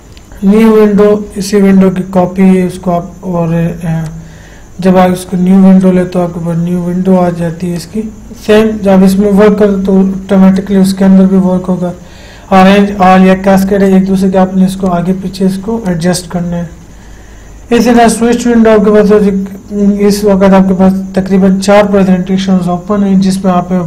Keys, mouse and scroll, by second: 4.3-8.0 drag, 10.8 click, 10.9 click, 14.2 click, 18.3 click.